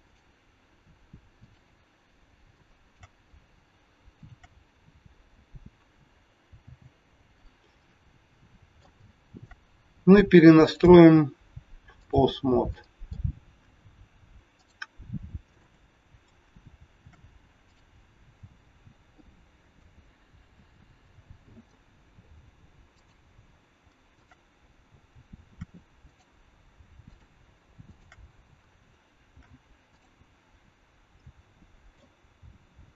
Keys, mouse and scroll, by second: 1.4 click, 2.2 scroll up 2, 2.5 shift+middle click, 4.2 shift+click, 4.3 shift+click, 6.5 f, 7.4 scroll down 2, 7.9 scroll down 3, 8.3 middle click, 8.9 shift+middle click, 10.8 click, 12.7 middle click, 14.4 click, 15.4 shift+click, 17.0 ctrl+shift+c, 20.4 ctrl+z, 22.0-22.4 scroll up 2, 22.9 click, 24.1 shift+click, 25.4 ctrl+shift+c, 27.0 click, 27.8 shift+click, 29.2 ctrl+shift+c, 31.2 middle click.